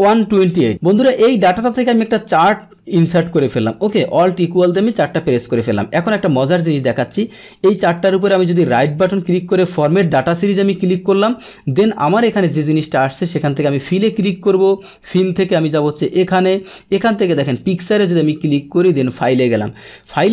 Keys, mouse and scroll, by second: 0.7-2.0 drag, 2.8 alt+F1, 3.9 click, 5.6 click, 6.6 click, 7.4 right click, 9.7 click, 13.4 click, 15.3 click, 17.4 click, 18.9 click.